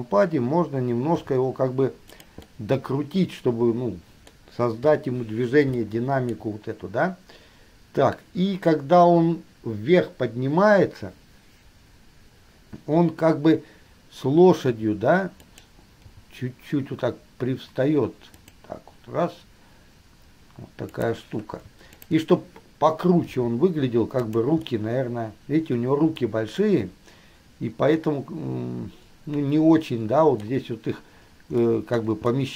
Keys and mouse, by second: 1.3 middle click, 1.3 r, 2.6-5.0 middle drag, 5.0 KP_3, 15.0 r, 16.2 g, 21.1 click, 22.2 shift+click, 23.5 g, 24.8-30.7 middle drag, 31.8 middle click, 32.2 click.